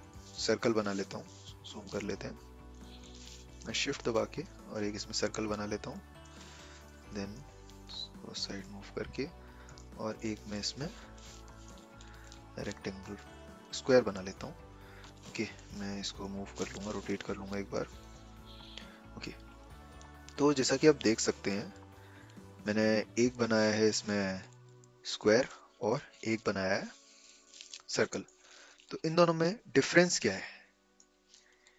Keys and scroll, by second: 6.8 v, 11.8 v.